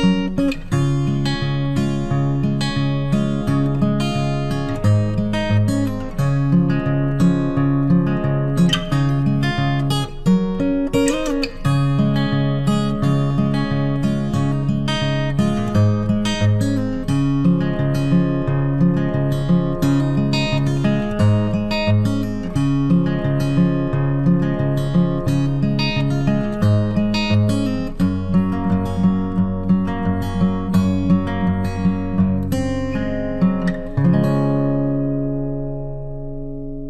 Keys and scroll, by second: 24.0 ctrl+t.